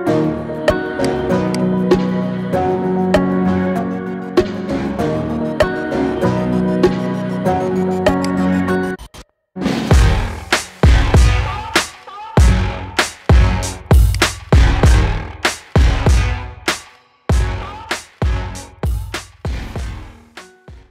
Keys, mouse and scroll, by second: 2.9 scroll down 1, 3.2-3.8 shift+middle drag, 3.8-4.3 scroll up 3, 4.3-8.2 shift+middle drag, 8.2-11.3 drag, 11.8-12.6 scroll down 3, 12.6-13.2 shift+middle drag, 13.2 scroll down 3, 14.1 click, 17.2 scroll down 1, 17.9 scroll down 2.